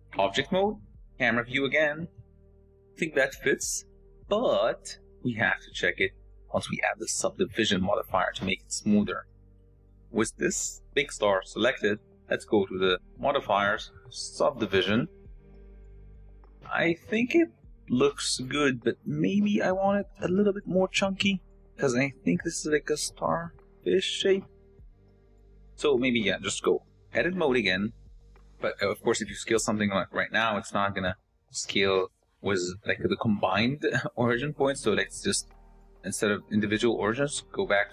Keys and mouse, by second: 1.0 KP_0, 13.2-14.8 drag, 17.4 s, 26.9 Tab, 28.9 s, 35.5-37.9 drag.